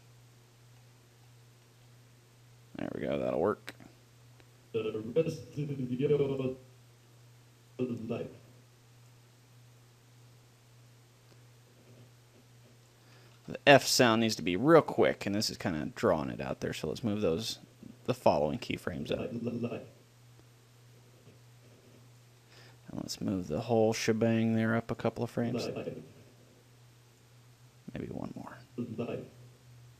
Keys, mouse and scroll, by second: 5.0-6.8 drag, 6.9-8.1 middle drag, 8.1 click, 9.7 middle click, 10.6 click, 11.6-12.6 drag, 13.6 a, 13.6 b, 15.3-16.9 middle drag, 15.9 g, 17.1-19.6 drag, 22.7 a, 22.9 b, 24.3 g, 25.2-27.3 drag, 27.8 g, 28.6-29.9 drag.